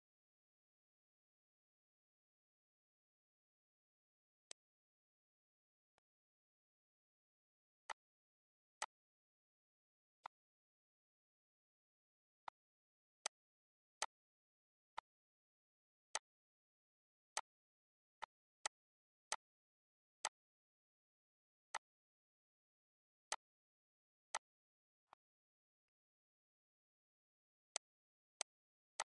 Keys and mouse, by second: 3.9 ctrl+s, 4.4 click, 5.6 click, 7.4 click, 8.2 click, 9.9 click, 11.6 Delete, 12.3 click, 13.1 click, 13.9 click, 14.7 click, 15.9 click, 16.6 Delete, 17.2 click, 17.9 click, 18.9 click, 19.8 click, 21.4 click, 22.3 Delete, 23.0 click, 24.0 click, 24.7 click, 25.5 click, 27.6 click, 28.3 click, 28.8 click.